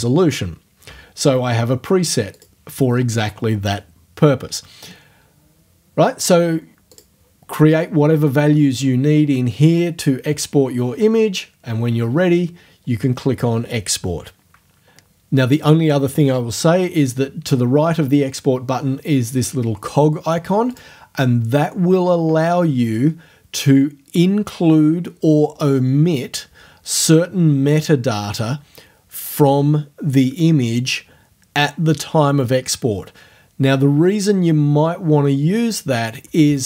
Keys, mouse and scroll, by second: 2.3 click, 6.9 click, 20.7 click.